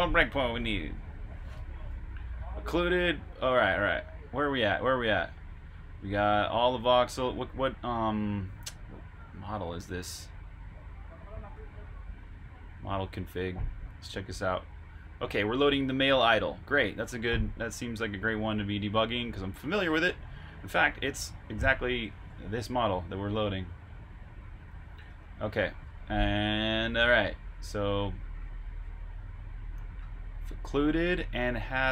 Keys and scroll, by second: 20.3 super+Tab, 25.0 super+Tab, 27.6 super+Tab.